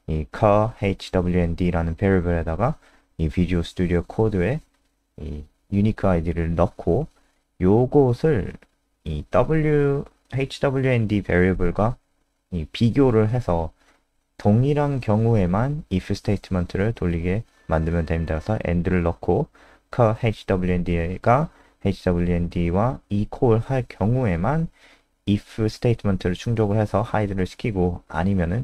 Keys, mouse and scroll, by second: 0.0-0.7 typing, 0.9 Escape, 2.1 click, 2.2 click, 6.0 click, 6.2 click, 7.3 ctrl+c, 11.8 click, 16.7 typing, 18.2 ctrl+v, 20.1-21.1 typing, 21.3 ctrl+s, 22.6 click.